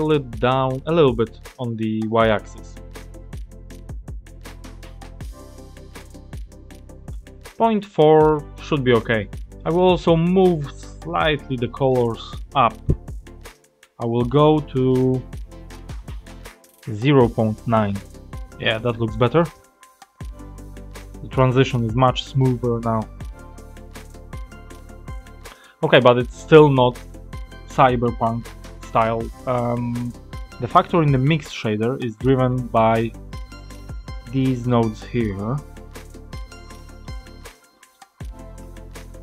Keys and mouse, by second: 0.7 click, 4.2-7.1 drag, 9.3 click, 12.1 click, 12.7 click, 14.8 click, 15.9-18.1 drag, 23.7 click, 25.3 click, 29.7-30.4 drag, 31.1 click, 32.1 click, 33.2-34.2 drag, 34.6 click, 35.6 click, 36.8 click, 37.8 click, 38.5 click.